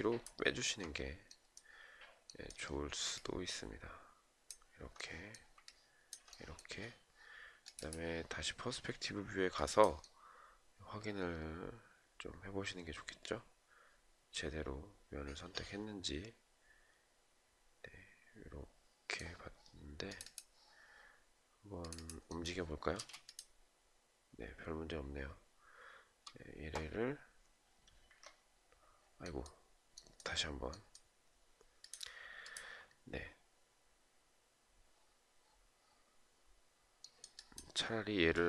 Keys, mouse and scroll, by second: 2.7 ctrl+click, 5.2 ctrl+click, 22.4 space, 27.5 Escape, 37.9 shift+click.